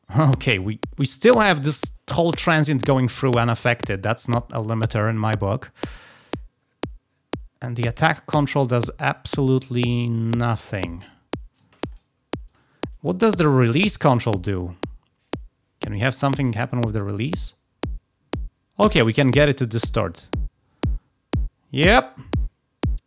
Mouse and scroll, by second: 6.0-8.3 drag, 8.7-9.8 drag, 10.6 click, 10.7 click, 11.7 drag, 12.3 click, 12.9 drag, 13.9 click, 14.3 click, 15.8 click, 16.4-23.0 drag.